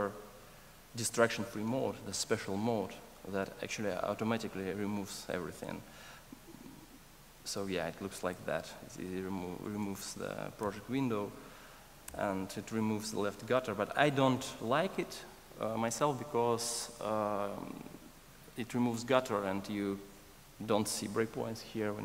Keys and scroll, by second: 10.6 alt+F1.